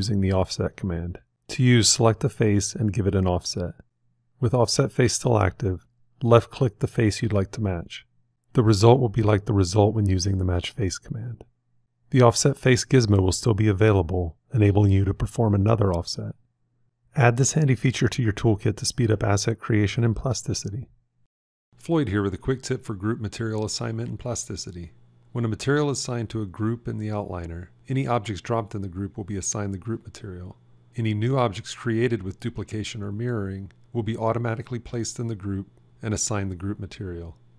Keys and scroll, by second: 33.7 alt+x.